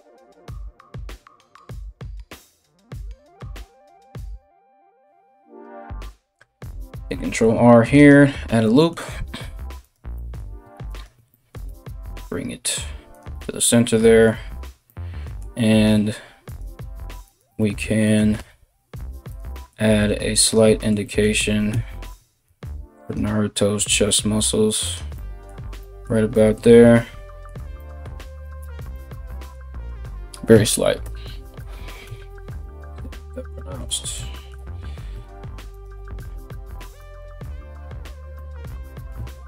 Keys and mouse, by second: 6.9 ctrl+r, 9.4 right click, 9.5 middle click, 10.5 ctrl+right click, 10.7-39.4 ctrl+middle drag, 11.2 g, 16.0 click, 16.8 ctrl+click, 18.0 g, 19.5 g, 21.3 KP_3, 22.1 g, 23.4 g, 28.2 Tab, 30.6 Tab, 31.6 KP_1, 35.3 alt+right click.